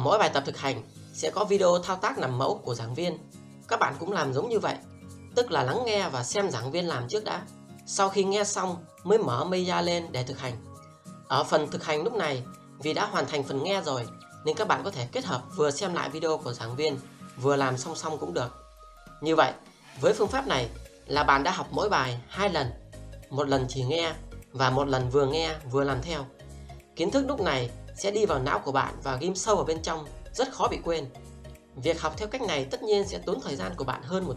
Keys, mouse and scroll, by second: 0.6 click, 1.4 double click, 2.8 click, 3.9 alt+middle click, 4.4 click, 4.8 alt+click, 5.0 alt+middle click, 5.2 alt+click, 5.5 space, 6.2 r, 6.4 click, 7.1 w, 7.3 click, 8.2 click, 9.2 r, 9.4 click, 9.8 w, 10.0 click, 10.6 space, 11.0 scroll up 1, 11.4 alt+middle click, 11.7 click, 13.7 space, 14.4 alt+click, 14.8 alt+middle click, 15.0 click, 15.4 click, 16.2 click, 17.6 click, 17.8 alt+middle click, 18.0 alt+click, 18.1 scroll down 1, 18.7 click, 19.4 double click, 20.4 shift+d, 20.6 click, 21.0 shift+click, 22.8 alt+click, 23.0 scroll up 1, 23.0 alt+middle click, 23.2 alt+click, 23.5 click, 24.0 scroll down 1, 24.4 space, 25.6 alt+middle click, 25.7 scroll up 1, 25.8 alt+middle click, 26.1 click, 27.3 r, 27.5 click, 28.2 space, 29.2 click, 30.1 space, 30.9 alt+click, 32.0 space, 33.6 alt+middle click, 34.2 w.